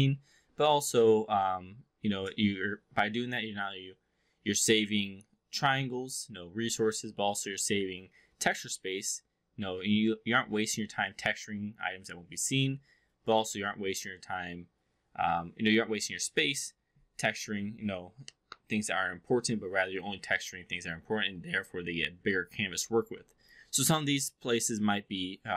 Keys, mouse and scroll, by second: 23.4-24.2 alt+drag.